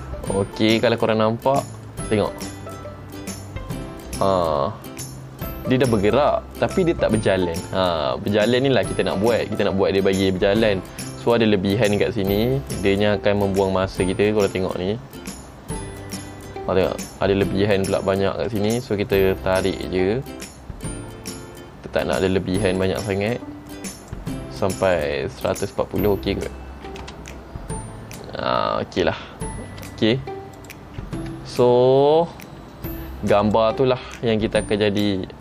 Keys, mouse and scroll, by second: 0.8 space, 1.3 middle click, 2.5-2.8 scroll up 4, 3.4 middle click, 3.4-3.8 scroll up 3, 5.0-5.9 scroll down 2, 5.9-6.4 scroll down 2, 18.6 space, 19.8 click, 24.1 click, 25.5 click, 27.2 space, 29.9 space, 30.7 click, 32.8-33.6 scroll down 2, 33.6 click, 34.7 middle click.